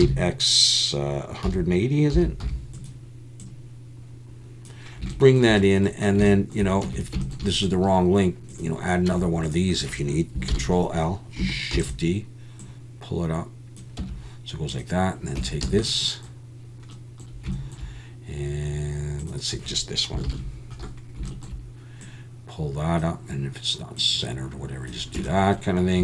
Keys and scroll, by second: 0.0 x, 1.5 1, 2.1 8, 2.4 0, 6.8 Tab, 9.1 Tab, 10.5 ctrl+l, 11.7 shift+d, 14.0 Tab, 15.4 Tab, 15.6 a, 20.3 ctrl+l, 25.2 Tab.